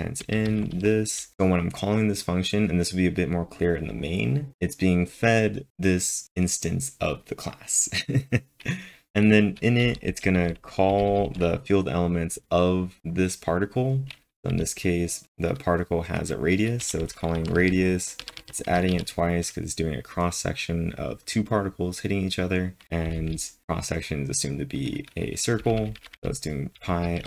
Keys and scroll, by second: 9.1 typing, 14.5 typing, 18.2-18.9 typing, 23.1 typing, 26.8-27.2 typing.